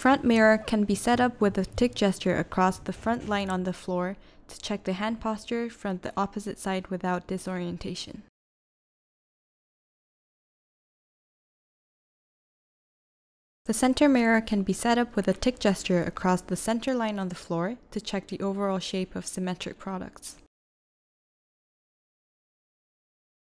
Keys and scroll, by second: 2.1 v, 13.7-14.4 typing, 15.6 v, 19.4 v, 21.4 i.